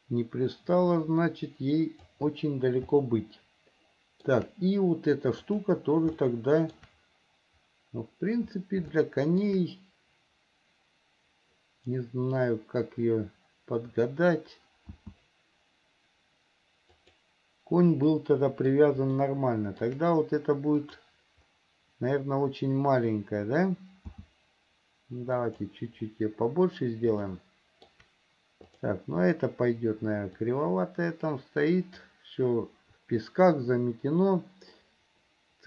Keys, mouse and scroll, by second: 3.2-4.5 shift+middle drag, 5.6 click, 6.4 shift+middle click, 9.1 shift+middle click, 15.1 s, 18.4 middle click, 19.4 shift+middle click, 21.0 click, 24.3 s, 27.5 shift+middle click, 28.9 click, 30.7-32.3 drag, 35.0-35.6 middle drag.